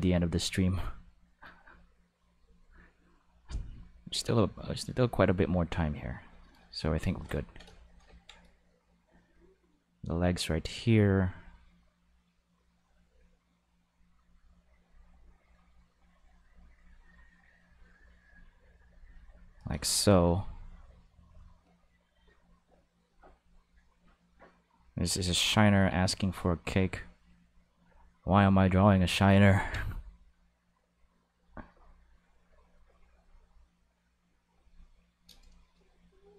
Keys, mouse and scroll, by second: 0.5 click, 1.4 click, 2.4 click, 4.4 click, 5.7 click, 9.0-10.5 drag, 11.3-13.0 drag, 13.5 click, 14.8-16.1 drag, 16.6-17.6 drag, 18.1 click, 21.2-22.4 drag, 23.1-24.9 drag, 25.5 click, 26.6-27.8 drag, 28.3 click, 29.3 ctrl+z, 29.5 ctrl+z, 30.4 click, 31.9-33.1 drag, 33.2 click.